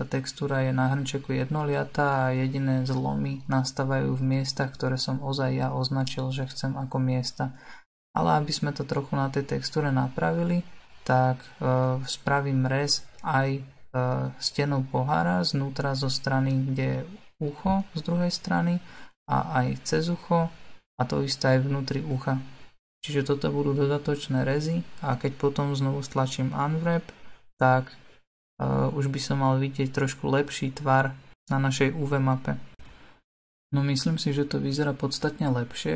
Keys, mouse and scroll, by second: 0.3-3.8 middle drag, 3.8 alt+click, 4.5-11.2 middle drag, 11.2 u, 12.3-13.5 middle drag, 13.5 space, 14.0 space, 15.5 alt+click, 16.5-18.2 middle drag, 18.2 u, 19.3 click, 20.0-28.1 middle drag, 28.1 a, 31.1 u.